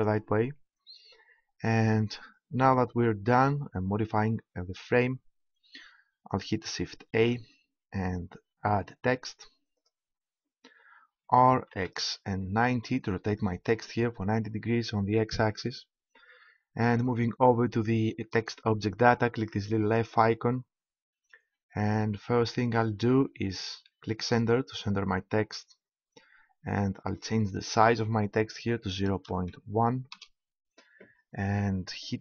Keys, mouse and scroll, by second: 7.1 shift+a, 11.2 r, 20.1-26.0 drag, 26.0 middle click, 26.1-27.1 scroll up 1, 27.1-27.5 scroll up 1, 27.5-29.3 drag.